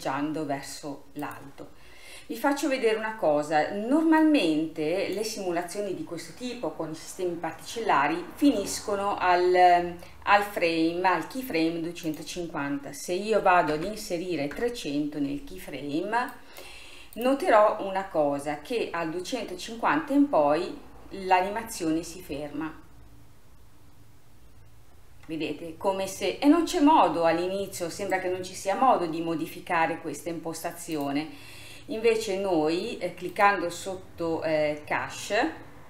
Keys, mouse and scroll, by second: 1.3 click, 1.9-4.3 scroll down 3, 4.3-7.3 drag, 12.2-13.9 drag, 13.9 KP_0, 16.4-20.3 drag, 20.7-21.7 scroll down 1, 21.7-23.8 scroll down 3, 25.3-27.0 scroll up 1, 27.0-28.2 scroll up 1, 28.2 scroll up 1, 31.0-32.0 drag, 32.0-33.3 scroll down 3, 33.3-35.8 drag.